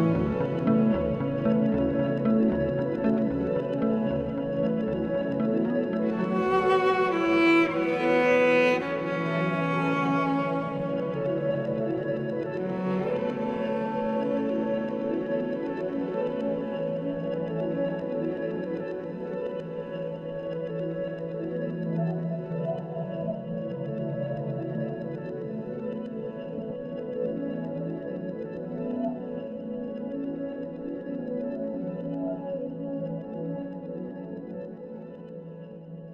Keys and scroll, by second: 3.3 3, 6.3 s, 8.6 2, 10.2-12.9 typing, 18.2 s, 21.1 4, 24.2 ctrl+z, 35.1 3.